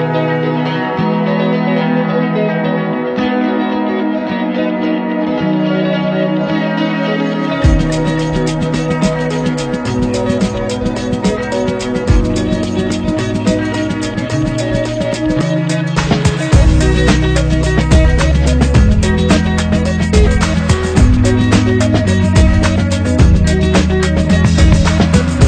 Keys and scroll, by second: 14.9 3.